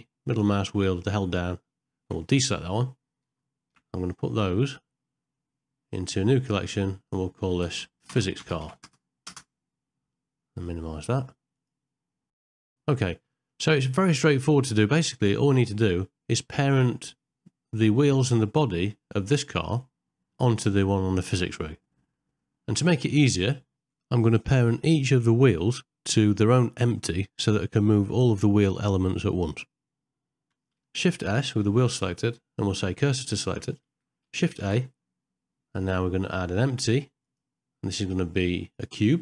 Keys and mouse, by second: 3.7 m, 11.5 click, 12.1 ctrl+middle click, 12.3 shift+middle click, 13.4 middle click, 13.8 middle click, 22.5 shift+middle click, 24.0 ctrl+middle click, 25.4 middle click, 26.6 ctrl+middle click, 29.5 middle click, 31.6 shift+s, 34.6 shift+a.